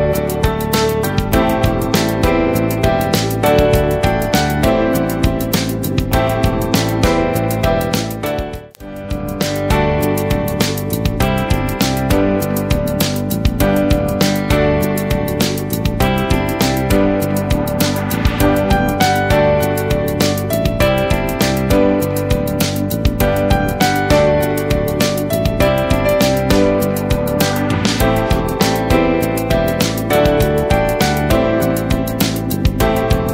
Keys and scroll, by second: 7.9 Left, 9.8 ctrl+a, 18.4 ctrl+Return, 20.6 ctrl+a, 30.3 ctrl+-, 32.1 ctrl+space, 32.6 ctrl+space.